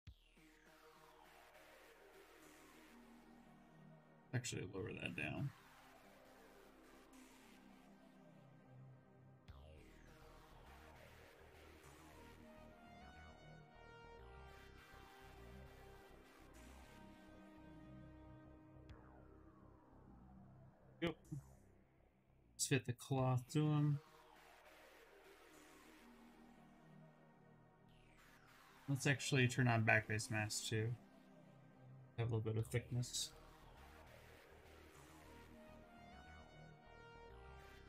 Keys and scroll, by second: 3.2 shift+d, 4.0 s, 4.6 d, 6.1 shift+d, 6.3 s, 10.5 s, 15.8 s, 18.1 s, 27.4 s, 29.0 2, 32.8 d.